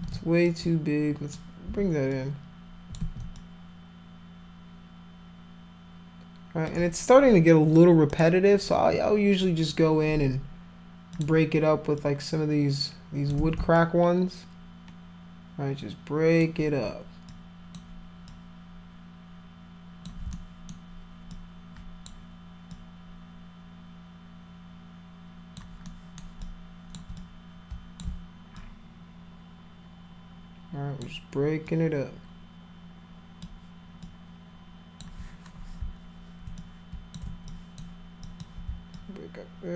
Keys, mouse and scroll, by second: 0.5 alt+click, 2.1 click, 3.0 ctrl+z, 3.4-6.7 alt+drag, 8.1 click, 11.2 click, 12.0-13.3 drag, 13.4 ctrl+z, 13.7-16.4 alt+drag, 17.3 alt+click, 18.3-20.1 alt+drag, 20.3 alt+middle click, 21.3 alt+click, 22.7-25.6 alt+drag, 25.9 alt+middle click, 26.5 alt+click, 27.2 click, 28.6-31.0 alt+drag, 31.7-33.4 alt+drag, 34.0 alt+click, 36.6 click, 37.5 alt+click, 38.3 alt+click, 39.0-39.7 alt+drag.